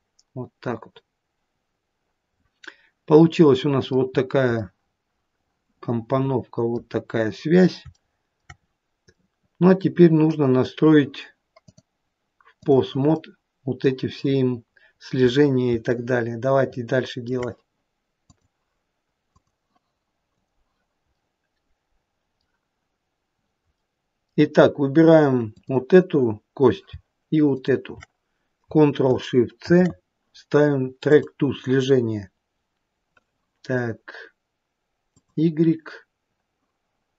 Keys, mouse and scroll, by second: 4.3-4.7 scroll up 2, 4.7 middle click, 7.1-7.9 scroll down 2, 8.1 shift+middle click, 8.9-9.4 scroll up 1, 9.4 middle click, 11.8 click, 13.3 middle click, 14.8-15.8 scroll down 1, 16.1 shift+middle click, 21.4 middle click, 24.1 middle click, 25.8 click, 27.9 shift+click, 35.4 click.